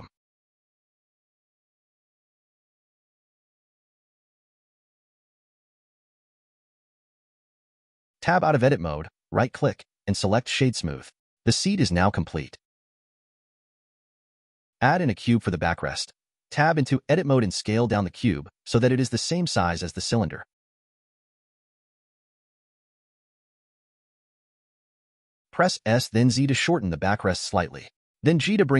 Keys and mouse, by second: 2.4 click, 4.0 alt+click, 4.7 e, 6.9 click, 8.6 Tab, 9.2-9.9 drag, 10.4 right click, 11.6-12.2 drag, 14.3 shift+a, 16.9 Tab, 19.3 s, 23.1 middle click, 26.7 s.